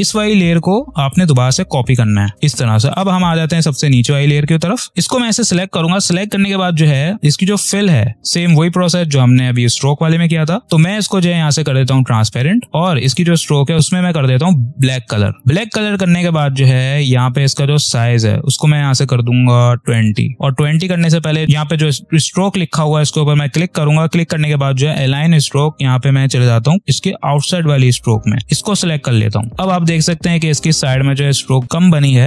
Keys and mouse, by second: 7.5 click, 11.6 click, 14.7 click, 17.7 click, 22.5 click, 27.3 click, 29.2 click, 31.6 ctrl+=.